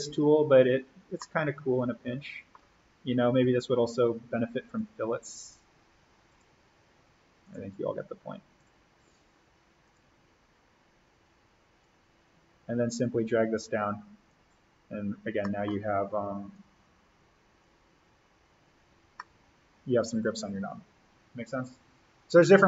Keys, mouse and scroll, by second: 0.5-1.1 scroll up 1, 1.1 middle click, 1.3 scroll, 3.3-14.9 drag, 14.9-15.3 scroll up 1, 15.3 middle click, 15.7-16.5 scroll down 1, 16.5-18.9 drag, 18.9-19.2 scroll up 1, 19.2 scroll.